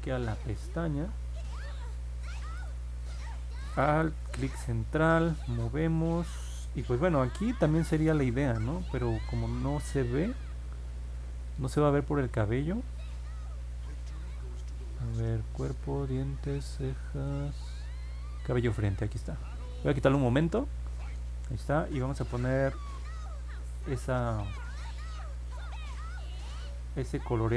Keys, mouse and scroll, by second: 0.0 click, 0.3 click, 0.6 click, 4.5-7.2 alt+middle drag, 25.2 click.